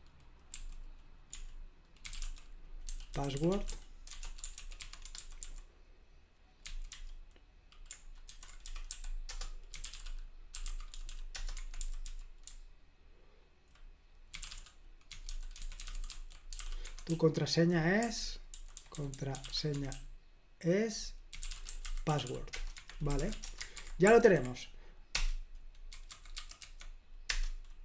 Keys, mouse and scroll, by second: 0.0-6.9 typing, 8.6-24.2 typing, 22.7 Escape, 25.1 Return, 25.6-27.0 typing, 27.2 Return.